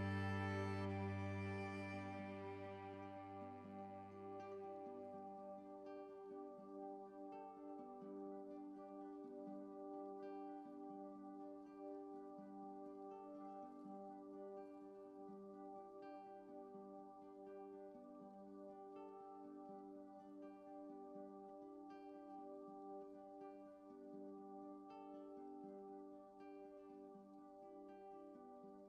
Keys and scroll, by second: 7.6 ctrl+shift+a, 22.6 ctrl+t.